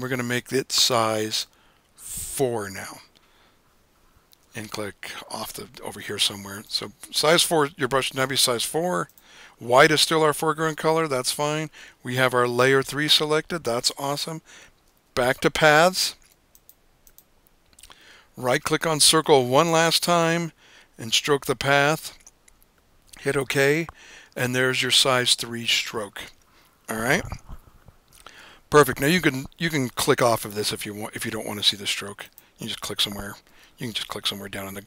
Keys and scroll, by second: 2.9 4.